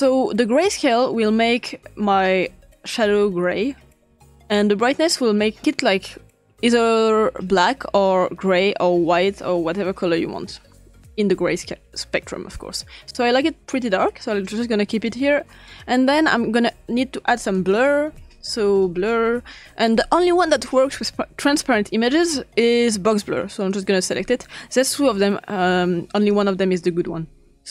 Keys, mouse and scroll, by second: 0.3-1.0 drag, 1.0 click, 2.5-3.1 drag, 4.9-14.1 drag, 14.9 click, 15.7 click, 16.6 click, 17.5 click, 18.4-19.7 typing, 23.7-25.0 drag, 26.2 click.